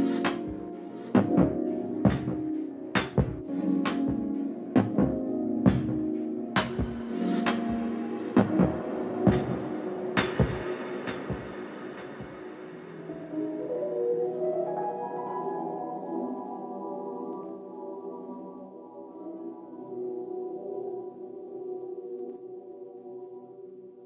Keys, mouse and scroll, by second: 0.0 click, 0.4 scroll up 1, 0.5 shift+middle click, 1.2 click, 1.5 scroll up 1, 1.7 middle click, 2.3 click, 2.7 KP_Decimal, 3.1-10.2 middle drag, 4.5 scroll down 1, 5.1 scroll up 2, 5.8 scroll up 2, 8.7-10.2 scroll down 2, 10.2-14.0 drag, 14.0-15.1 shift+middle drag, 14.4 scroll up 2, 15.1 click, 16.2-17.9 middle drag, 17.9-21.6 drag, 21.4 scroll up 1, 21.6-24.0 shift+middle drag, 21.9 scroll down 1, 22.6 scroll down 1, 23.4 scroll down 1.